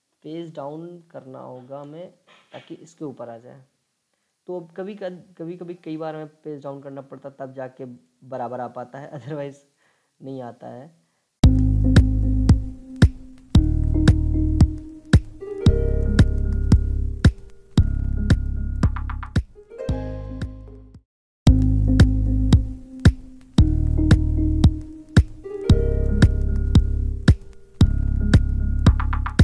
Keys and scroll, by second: 0.2 ctrl+Page_Down, 0.5 ctrl+Page_Down, 0.8 ctrl+Page_Down, 1.0 ctrl+Page_Down, 1.2 ctrl+Page_Down, 1.3 ctrl+Page_Down, 1.6 ctrl+Page_Down, 12.3 ctrl+Page_Down, 13.3 ctrl+g, 13.7 ctrl+z, 22.5 ctrl+a.